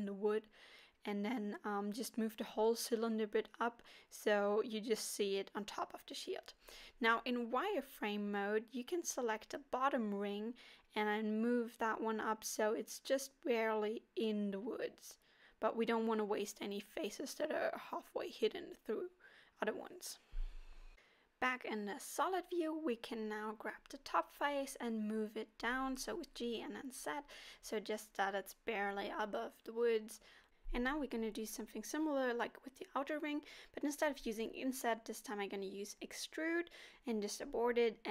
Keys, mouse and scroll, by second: 3.1 scroll down 1, 3.2 scroll up 4, 3.6 middle click, 5.3 z, 6.3 middle click, 7.5 click, 8.4 alt+click, 9.7 KP_1, 10.5-11.3 scroll up 1, 11.3 g, 15.1 middle click, 16.9 click, 17.4 click, 18.0 middle click, 19.5 z, 22.0 g, 25.8 middle click, 27.2 g, 28.6 g, 29.7 middle click, 32.6 e, 34.0 s.